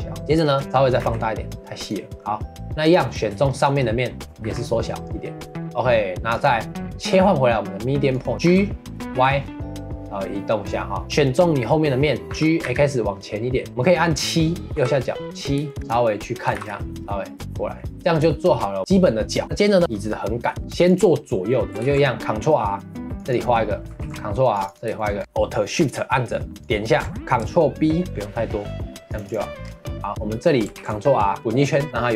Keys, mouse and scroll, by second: 0.2 shift+middle click, 1.0 s, 2.1 middle click, 2.8 click, 3.5 shift+click, 4.4 s, 5.6 middle click, 6.3-8.3 drag, 11.0-12.3 shift+middle drag, 12.3 g, 14.7 KP_7, 15.3-15.7 scroll up 1, 15.7 shift+middle click, 15.8 click, 16.5 g, 18.0-18.5 middle drag, 18.5-19.0 scroll up 2, 20.4 middle drag, 20.6 scroll up 1, 20.8 click, 21.5 middle click, 21.6 scroll up 1, 21.8 ctrl+r, 24.0 ctrl+r, 24.9 shift+middle click, 25.2-25.6 scroll up 1, 26.6 alt+shift+click, 27.1 middle click, 29.2 shift+click, 29.6 scroll down 1, 29.8 middle click, 30.7 ctrl+r.